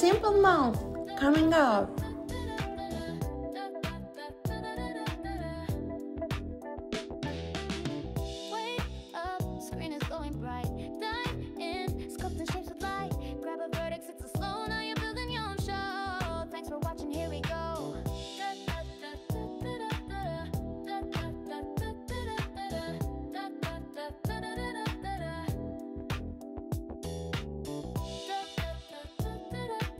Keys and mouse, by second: 0.5 g, 1.3 click, 2.2 click, 2.6 g, 5.6 click, 6.2 g, 8.2 click, 8.8 g, 10.1 click, 10.4 g, 11.5 click, 19.0 click, 22.2 click, 25.6 e, 26.1 s, 28.6 click.